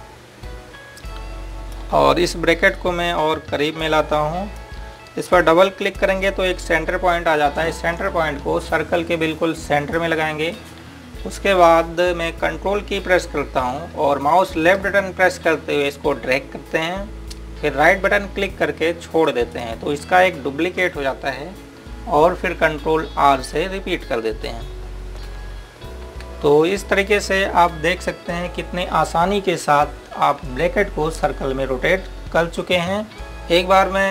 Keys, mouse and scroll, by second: 9.5 click, 15.3 click, 20.2 ctrl+right click, 24.7 ctrl+Num_Lock, 27.4 typing, 33.1 click, 33.6 scroll up 1.